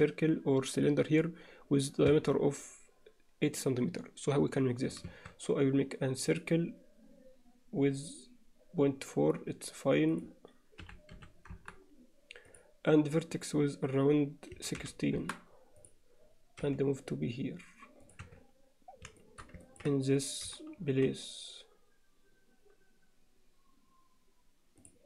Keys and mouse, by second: 2.1 Tab, 5.1 shift+a, 8.0 click, 10.2 click, 12.5-15.6 drag, 15.8 click, 16.6 g, 18.2 z, 19.2 alt+shift+middle click, 19.6 ctrl+middle click, 20.4 g.